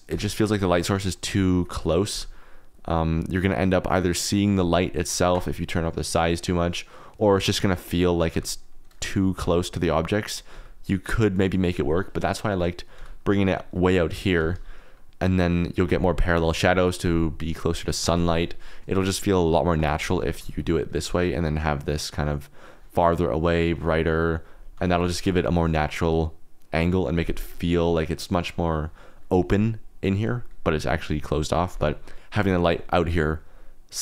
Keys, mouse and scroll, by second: 0.0 KP_0, 1.3 r, 1.9 click, 2.1 g, 5.1 Escape, 6.1-7.5 drag, 8.3 g, 9.3 r, 9.8 r, 10.5 g, 11.2 click, 12.9 g, 13.4 click, 13.8 r, 14.3 r, 14.5 r, 15.5 click, 18.2-19.7 drag, 20.1 g, 20.3 z, 23.1 z, 23.7-24.8 drag.